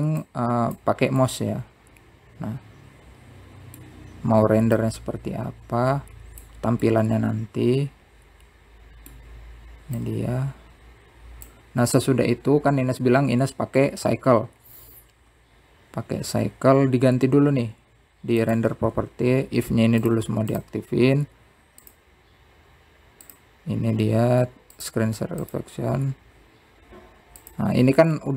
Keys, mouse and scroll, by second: 0.6-3.7 middle drag, 4.1-6.2 drag, 6.2-9.1 middle drag, 9.3-12.3 drag, 17.7 click, 19.4 click, 19.9 click, 21.2-24.7 drag, 25.6-28.0 drag.